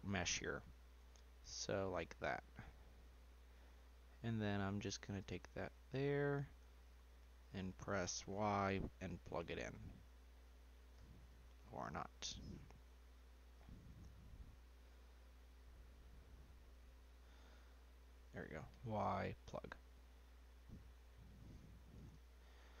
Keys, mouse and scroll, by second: 1.3 middle click, 1.9 scroll up 1, 2.6 click, 4.8 click, 6.8 shift+click, 8.3 y, 11.4 ctrl+z, 12.5 click, 13.5 click, 15.0 click, 17.6 shift+click, 18.8 y, 21.2-22.8 middle drag.